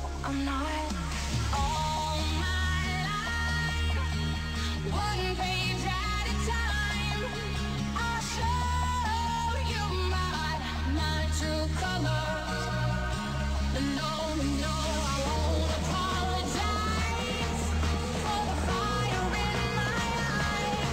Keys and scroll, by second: 10.6 ctrl+s, 15.0 space.